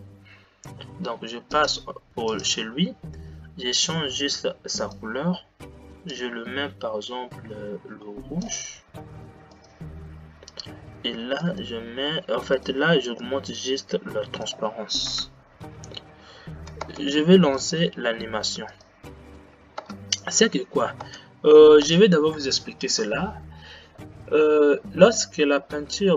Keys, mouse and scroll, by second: 2.3 click, 6.3 click, 9.9 click, 12.6 click, 13.5-16.9 drag, 16.9 space, 17.6 click, 18.8 click, 20.0 space, 21.1 space.